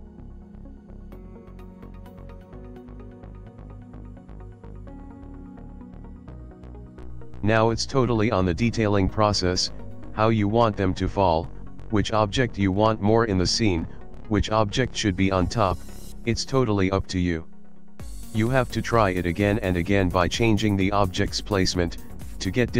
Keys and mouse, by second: 1.2 middle click, 2.2 middle click, 2.9 middle click, 5.7 click, 6.2 shift+middle click, 6.8 click, 8.2 alt+d, 10.0 click, 11.4 alt+d, 12.6 middle click, 13.4 g, 18.9 middle click, 19.6 g, 20.6 middle click, 21.1 g, 22.0 middle click.